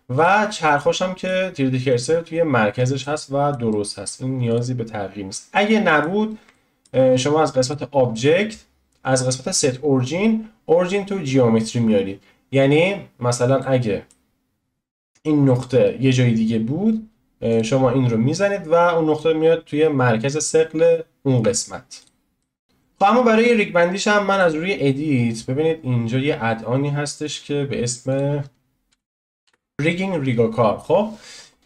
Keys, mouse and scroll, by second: 0.1 click, 0.7-1.8 middle drag, 1.8-2.2 scroll up 2, 2.2-3.0 scroll down 2, 3.0-4.5 middle drag, 4.5-5.5 drag, 5.5-7.6 middle drag, 7.6-13.6 drag, 13.6-17.5 middle drag, 17.5-19.8 drag, 19.8 scroll up 1, 20.8 scroll up 1, 20.8-22.0 scroll down 1, 22.0-22.4 drag, 22.4-24.3 middle drag, 24.3-28.9 drag.